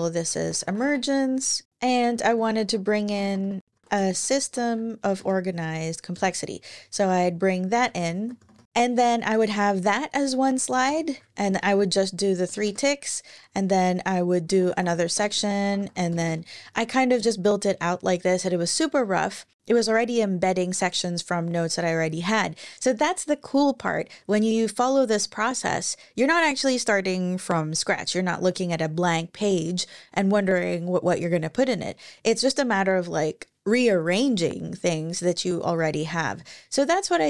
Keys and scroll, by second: 0.0-5.3 typing, 5.9 Return, 7.4 Left, 7.6 Left, 8.1 typing, 8.7 Up, 9.4 Down, 9.7 Down, 10.4 Return, 11.2 -, 12.2 Return, 14.0-17.0 typing.